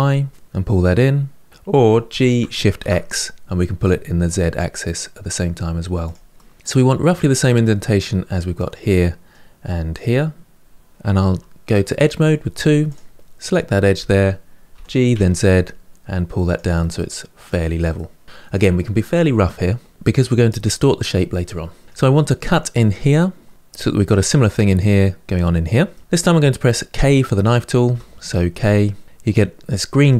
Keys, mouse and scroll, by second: 1.8 g, 6.1-11.4 middle drag, 11.7 2, 12.6 click, 13.2-14.5 middle drag, 14.5 g, 16.5-19.4 middle drag, 19.8 middle click, 20.6-21.3 scroll down 2, 21.3-23.5 middle drag, 25.7-27.6 middle drag, 27.6 k.